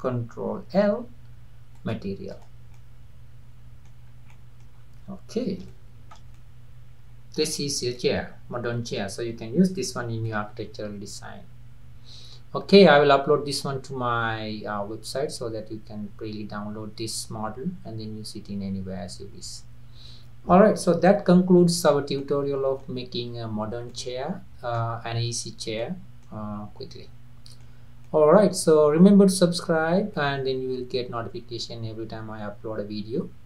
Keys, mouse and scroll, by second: 0.8 ctrl+l, 2.3 click, 2.8-4.1 middle drag, 4.1 scroll up 2, 4.3-4.8 middle drag, 4.8-5.7 scroll down 2, 5.7-7.6 shift+middle drag, 7.6-8.0 scroll up 3, 8.0-13.3 middle drag, 22.2-26.5 middle drag, 26.5-26.9 scroll down 1, 26.9-33.1 middle drag.